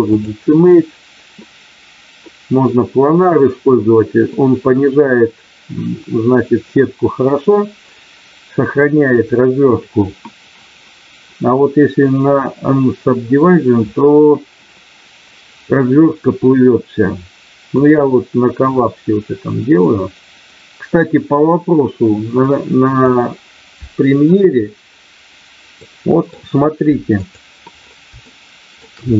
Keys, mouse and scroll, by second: 17.8-23.1 drag, 25.7 middle click, 27.2 click, 28.2 shift+middle click.